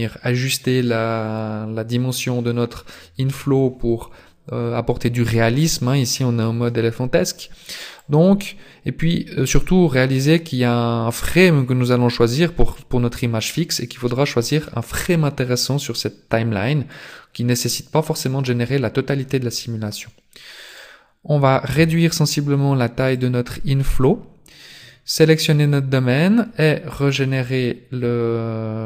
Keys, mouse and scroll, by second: 8.0 click, 20.8 right click, 21.8 s, 25.2 right click, 27.4 click.